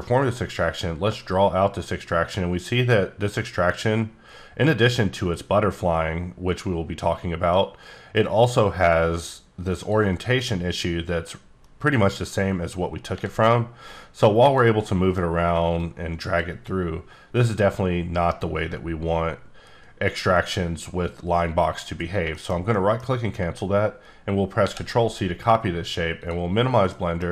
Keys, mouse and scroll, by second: 0.6 click, 9.7 shift+right click, 13.2 g, 14.4 click, 14.8 middle click, 15.8 click, 21.7 right click, 22.3 shift+middle click, 24.6 ctrl+c, 26.2 click, 26.8 middle click.